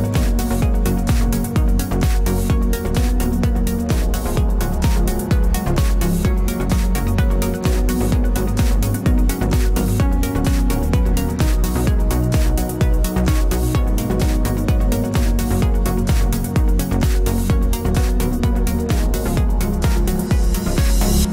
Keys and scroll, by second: 6.5 BackSpace.